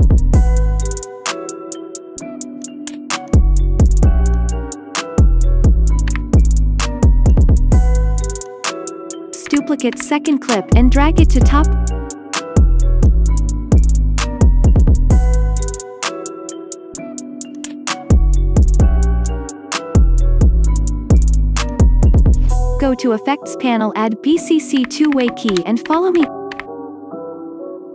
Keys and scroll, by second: 6.1 1, 9.8 ctrl+d, 24.8-26.4 typing.